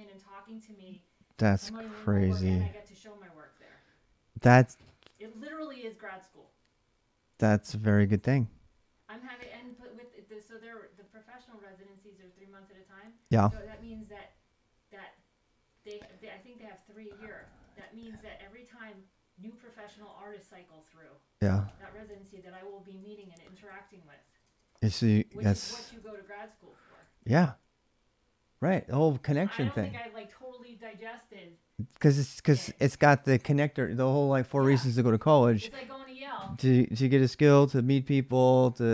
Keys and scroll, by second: 0.0-2.3 typing, 2.3 ctrl+[, 4.9 ctrl+[, 5.0-6.0 typing, 7.2 typing, 11.1-11.5 l, 13.2-14.0 typing, 15.2-27.7 typing, 16.2 ctrl+[, 22.8 ctrl+[, 29.4-30.2 typing, 31.7 h, 32.7 x, 32.9 x.